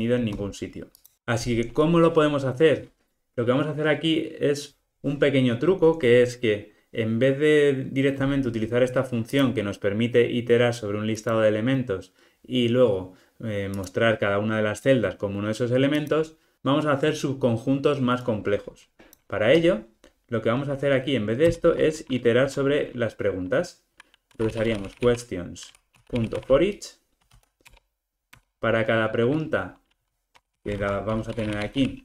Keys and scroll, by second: 27.7 Return.